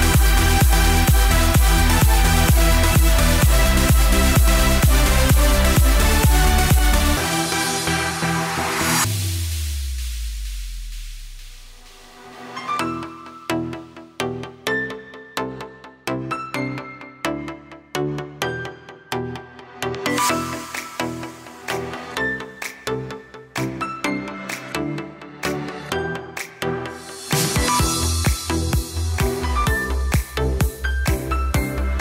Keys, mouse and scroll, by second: 0.0-1.0 middle drag, 1.0-2.5 scroll down 11, 2.5 click, 3.2 scroll down 1, 3.6-5.8 middle drag, 6.4-6.8 shift+middle drag, 6.8-8.2 shift+scroll up 1, 11.6 b, 12.2 KP_1, 12.9 s, 13.9 g, 15.9 click, 16.4-18.2 middle drag, 18.2 KP_1, 18.6 scroll up 1, 19.9 shift+a, 20.5 s, 22.2-22.7 scroll up 1, 22.7 KP_0, 23.7 KP_1, 24.2-24.7 scroll up 1, 24.7-27.8 drag, 29.4 click, 31.2 click, 31.9-32.0 scroll up 1.